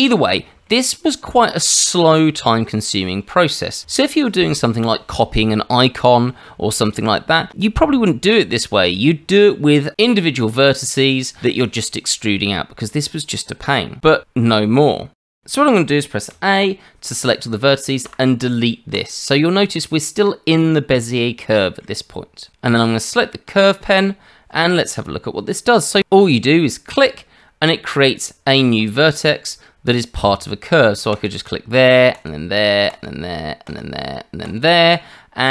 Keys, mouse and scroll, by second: 0.2-0.5 scroll down 2, 0.6 shift+middle click, 15.2 shift+middle click, 15.4 click, 16.3 a, 18.0 Delete, 21.4 shift+middle click, 23.9 click, 31.1 click, 32.1 click, 33.6 click, 34.4 click.